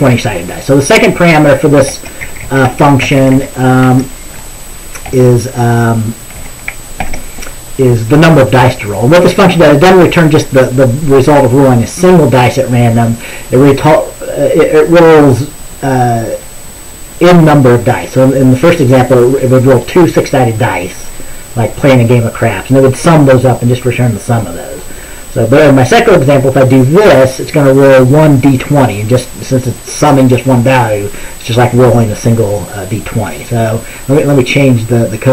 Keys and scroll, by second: 2.3 Up, 2.5 Up, 2.8 Right, 3.1 Right, 3.3 Right, 3.4 Right, 5.2 /, 6.5 typing, 7.1 ctrl+s.